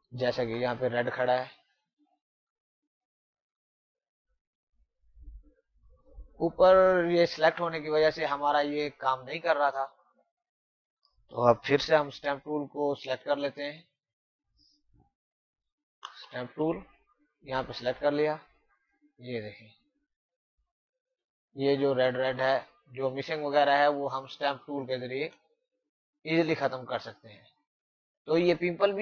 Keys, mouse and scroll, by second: 8.5 click, 11.9 s, 13.3 typing, 16.1 s, 17.0 click, 17.9 click, 20.8 click, 21.3 click, 22.8 alt+click, 23.2 click, 25.0 alt+click, 25.4 click, 27.7 alt+click, 28.2 click.